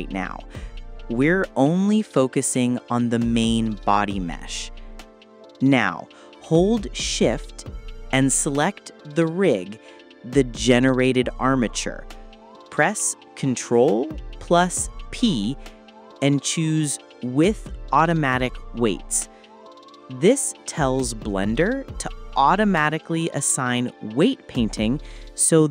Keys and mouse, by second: 5.2 shift+click, 7.8 click, 9.3 shift+click, 9.8 shift+click, 12.4 ctrl+p, 17.9 ctrl+p, 19.8 drag, 24.4 ctrl+z, 24.8 ctrl+z, 25.5 ctrl+z.